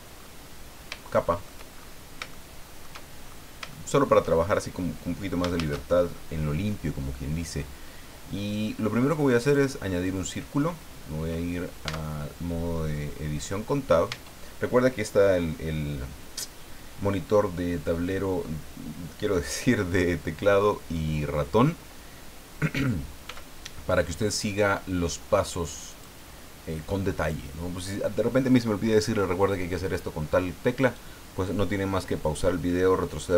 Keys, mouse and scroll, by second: 0.2-0.7 scroll up 2, 1.0 shift+middle click, 2.0 scroll up 2, 2.3 shift+middle click, 3.2 shift+scroll up 3, 3.7 shift+middle click, 4.5 shift+scroll down 3, 5.5 shift+a, 9.4 click, 11.9 Tab, 14.1 Tab, 23.2 s, 25.9 click.